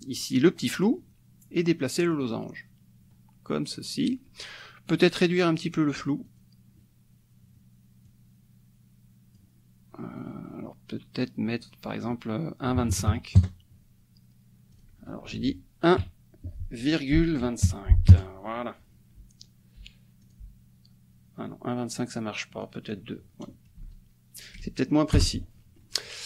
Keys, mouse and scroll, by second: 2.1-4.3 drag, 5.6 click, 6.2 click, 8.0-9.5 drag, 11.6 click, 12.7 KP_1, 12.9 KP_2, 13.1 KP_5, 13.3 KP_Enter, 14.7 click, 15.4 ctrl+a, 16.0 KP_1, 17.1 ,, 17.4 KP_2, 17.6 KP_5, 18.1 KP_Enter, 20.2 click, 22.8 click, 23.8 BackSpace, 24.5 BackSpace, 25.3 Return.